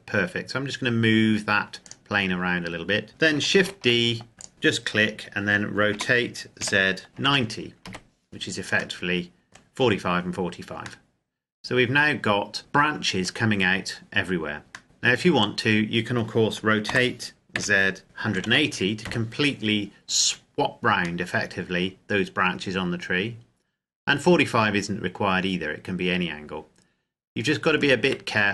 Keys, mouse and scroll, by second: 1.5 click, 3.0-3.3 scroll down 1, 3.3 shift+d, 4.3 click, 5.6 r, 6.3 z, 7.1 KP_0, 7.5 KP_Enter, 8.8 middle click, 14.7 middle click, 16.6 r, 17.2 z, 18.0 KP_1, 18.7 KP_Enter, 21.0 middle click, 27.7 Tab.